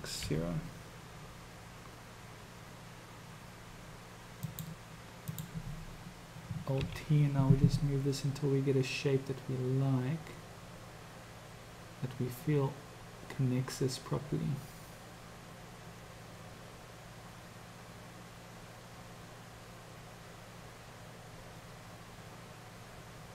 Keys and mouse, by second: 5.4 click, 6.9 ctrl+t.